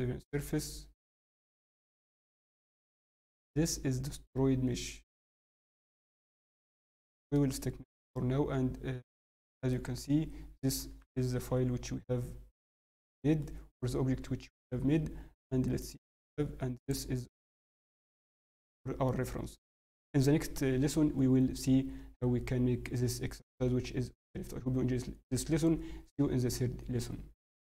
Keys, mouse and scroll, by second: 2.2 scroll down 4, 2.7 Tab, 3.1 Tab, 3.4 middle click, 4.4 scroll, 5.0 scroll, 5.2 scroll, 6.3 scroll down 5, 6.4 click, 6.9-7.3 scroll down 2, 7.3 middle click, 10.8 Tab, 11.0 scroll, 11.2 scroll down 3, 11.4 ctrl+s, 12.5 middle click, 12.9 scroll, 13.4 middle click, 13.4 scroll up 3.